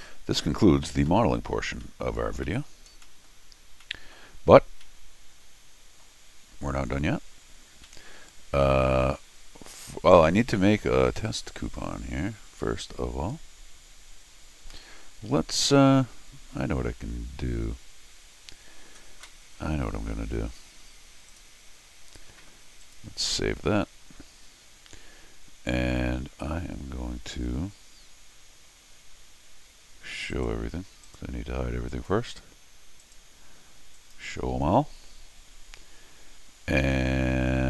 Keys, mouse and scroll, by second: 0.9 middle click, 1.7 middle click, 2.4 middle click, 2.9 middle click, 3.0 middle click, 3.6 middle click, 4.8-6.0 middle drag, 6.6 scroll up 1, 7.8-9.1 middle drag, 10.6-14.8 middle drag, 21.3 click, 22.8 click, 23.1 s, 30.3 right click, 31.0 right click, 31.9 click, 33.0 right click, 34.0 click, 35.6 scroll down 2, 36.4 scroll down 2, 36.8 scroll up 2, 37.5-37.6 scroll up 2.